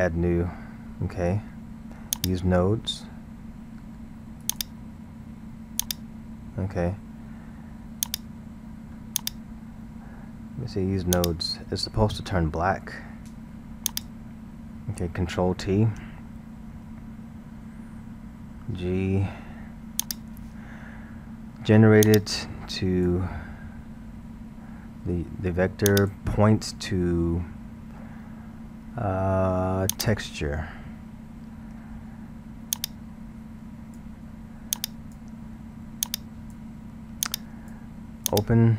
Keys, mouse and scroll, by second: 2.1 click, 4.5 click, 5.8 click, 8.1 drag, 9.2-11.3 drag, 13.9 click, 16.7 ctrl+t, 18.5 g, 22.1 click, 26.0-29.0 drag, 32.8 click, 34.7 drag, 36.1 click, 37.3 click, 38.3 click.